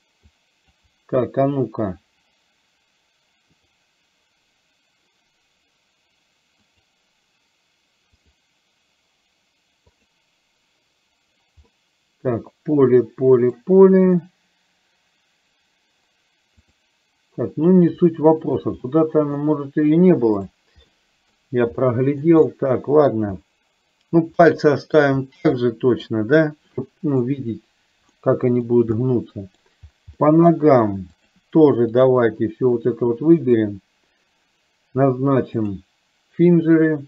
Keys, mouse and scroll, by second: 0.4-0.8 drag, 3.7 click, 6.8-8.5 drag, 10.0 click, 11.8-13.7 middle drag, 16.8 click, 18.2-18.5 shift+middle drag, 19.0-19.4 middle drag, 20.5 drag, 20.9-21.4 middle drag, 21.9-22.4 shift+middle drag, 22.5-23.2 middle drag, 24.4-25.0 middle drag, 25.8 middle click, 26.8-27.3 middle drag, 28.3-28.8 middle drag, 29.0-29.7 middle drag, 30.3-30.7 middle drag, 31.3 click, 32.0 shift+click, 33.2-33.7 shift+drag, 35.7-37.0 drag.